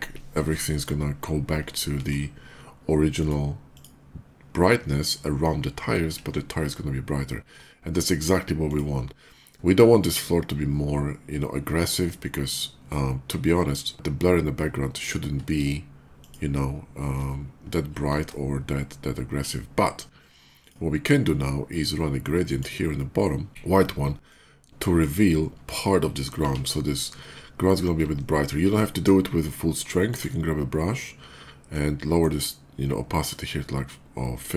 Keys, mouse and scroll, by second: 1.7 ctrl+d, 3.0 click, 3.4 click, 8.0 click, 8.4 click, 15.6 Caps_Lock, 16.1 click, 20.4 click, 22.1 click, 23.5 x, 24.1 click, 27.9 alt+middle click, 29.8 alt+click, 31.5-33.0 drag, 34.3 alt+right click.